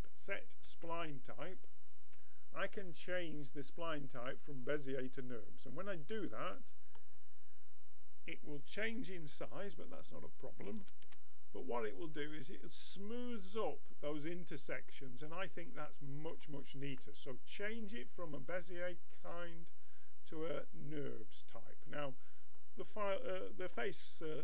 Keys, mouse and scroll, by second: 10.7 a, 11.1 Tab, 11.7-14.0 middle drag, 17.0-19.1 middle drag, 23.8-24.4 middle drag.